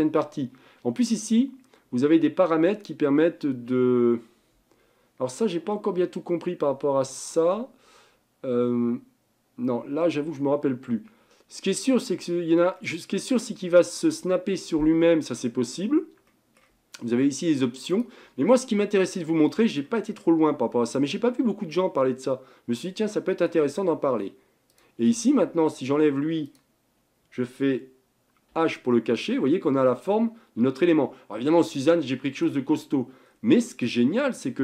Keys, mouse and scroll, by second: 12.8-16.0 middle drag, 16.3-17.9 middle drag, 17.9-19.0 drag, 19.0-23.5 middle drag, 24.7 drag, 25.9 Tab, 26.5 click, 28.5 h, 28.9-32.1 middle drag, 32.8-33.3 scroll up 4, 33.3 scroll down 3, 33.6-34.6 middle drag.